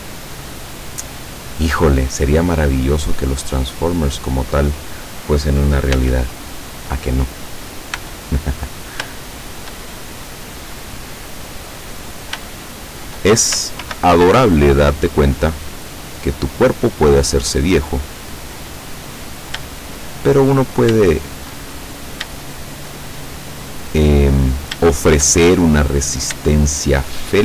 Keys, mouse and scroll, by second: 1.0 click, 3.0 click, 4.1 right click, 6.0 x, 6.5 click, 7.5 right click, 8.0 x, 8.4 click, 9.2 shift+middle click, 10.1-10.6 shift+scroll down 5, 10.9 middle click, 12.5 shift+middle click, 13.9 ctrl+r, 15.5 click, 17.3 click, 19.2 click, 21.1 shift+middle click, 22.0-22.6 shift+scroll up 6, 22.6 shift+middle click, 23.3-24.7 shift+middle drag, 25.0 shift+middle click, 25.5 shift+middle click, 26.6 shift+middle click.